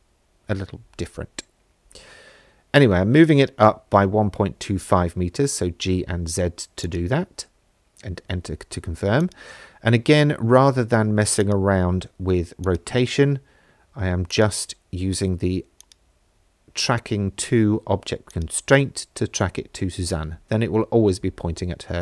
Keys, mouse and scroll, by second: 0.4 z, 1.6 KP_1, 1.8 KP_Decimal, 1.9 KP_2, 2.1 KP_5, 2.6 KP_Enter, 4.0 middle click, 6.8-8.4 drag, 9.2 click, 11.6-12.8 drag, 14.3 click, 15.8 click, 18.3 click, 19.4 middle click, 21.1 middle click, 21.7 shift+middle drag.